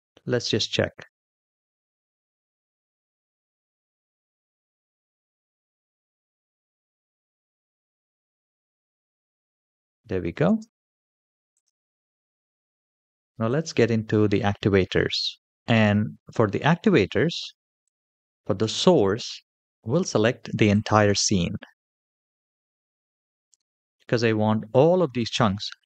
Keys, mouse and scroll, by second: 1.3 space, 10.3 space, 11.3 click, 13.3 click, 17.7 click, 19.6 shift+middle click, 20.5 click, 22.5-23.0 scroll down 2, 23.2 shift+middle drag, 23.8 middle click.